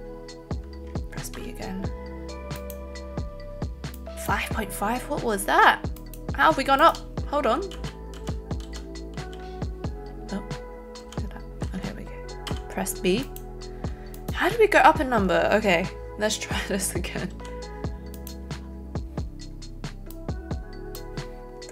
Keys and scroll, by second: 1.4 b, 7.7 ctrl+z, 8.6 ctrl+z, 9.1 ctrl+z, 10.9 ctrl+z, 12.4 b.